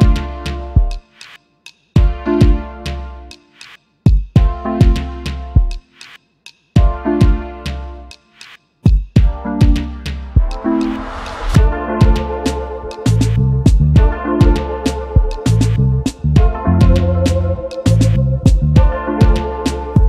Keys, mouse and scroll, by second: 0.7 space, 1.2 BackSpace, 1.4 BackSpace, 2.9-3.8 typing, 5.1 shift+space, 5.4 shift+space, 6.9-7.6 typing, 8.6-11.4 typing, 14.2 alt+scroll down 1, 14.5 space, 15.7 shift+click, 16.5 alt+scroll up 1, 16.7 space, 17.5 double click, 18.3 alt+scroll up 1.